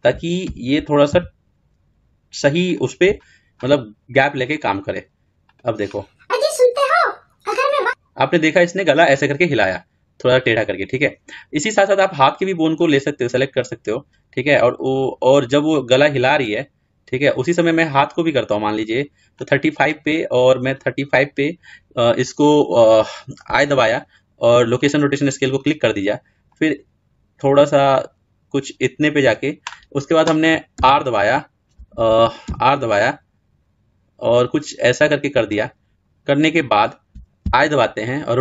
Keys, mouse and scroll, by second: 0.2 g, 4.7-19.1 drag, 24.7 i, 26.4 click, 38.2 i.